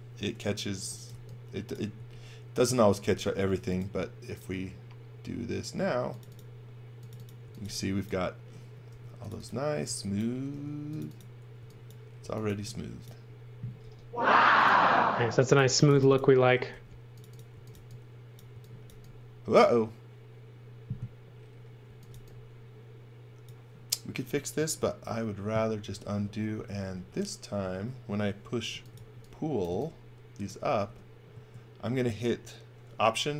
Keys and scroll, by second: 0.6-2.1 typing, 3.1 b, 7.2-10.5 typing, 11.6-13.8 typing, 15.4-18.9 typing, 21.8 x, 22.1 v, 24.8 super+z, 25.5 super+z, 26.2 super+z, 26.9 super+z, 27.6 super+z, 28.7-29.8 typing, 30.8 b.